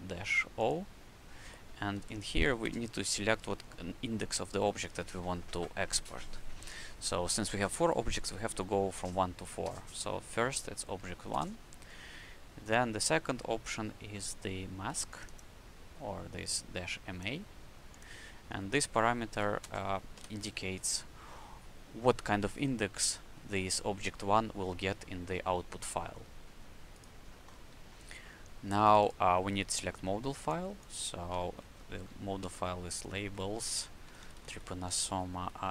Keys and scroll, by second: 1.4 KP_Subtract, 1.9 o, 2.6 space, 9.6 KP_1, 11.3 space, 18.7 KP_Subtract, 19.0-20.1 typing, 31.6-33.4 typing, 34.0 Left, 34.7-35.7 typing.